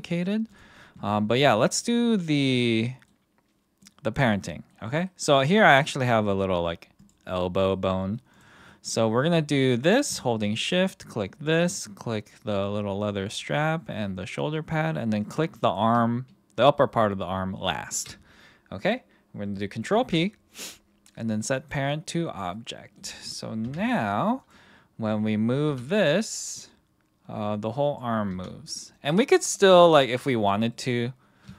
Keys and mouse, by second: 0.5 click, 2.2-3.0 middle drag, 3.8-4.2 middle drag, 4.5 middle click, 4.9 middle click, 5.8 middle click, 6.3 g, 7.3-7.7 middle drag, 8.3 click, 8.6 middle drag, 10.6 shift+click, 19.9 ctrl+p, 22.6-23.0 middle drag, 23.6 KP_1, 25.6 r, 27.8 click, 28.3 r, 29.3 click, 29.6-30.1 middle drag, 30.7 middle drag.